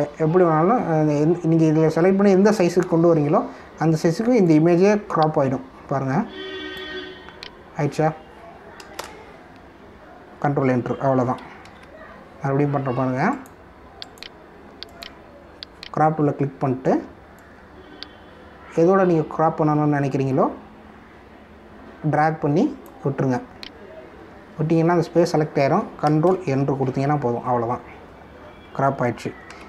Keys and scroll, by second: 0.5 ctrl+=, 9.9 ctrl+Return, 12.6 ctrl+z, 27.2 ctrl+Return.